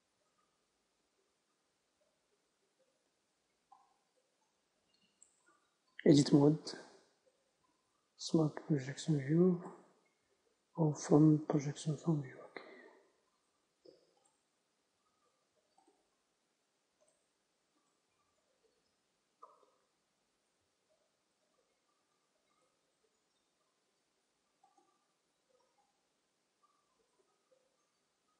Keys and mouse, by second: 0.0-4.6 drag, 4.6-5.9 middle drag, 5.9 Tab, 7.9 u, 10.7 u, 16.2-20.7 drag, 20.7 t, 22.9-24.9 drag, 23.7 u.